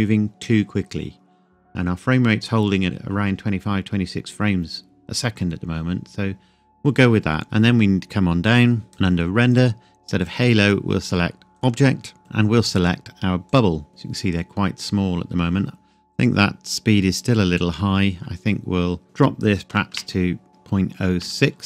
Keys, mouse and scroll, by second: 7.4-8.9 scroll down 1, 8.9 click, 9.4-10.2 scroll down 1, 10.2 click, 13.9-15.7 scroll down 1, 16.0-17.9 scroll up 1, 17.9-19.0 scroll down 1, 19.0 click, 19.7 BackSpace, 21.2 KP_6.